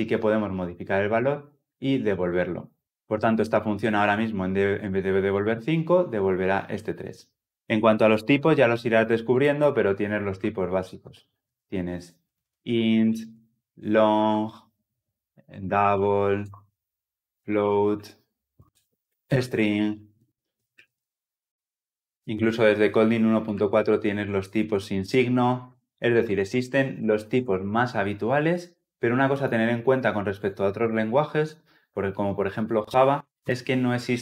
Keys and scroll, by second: 4.8 shift+F10, 11.3 ctrl+z, 12.3 ctrl+z, 25.9 ctrl+z, 27.2 ctrl+z.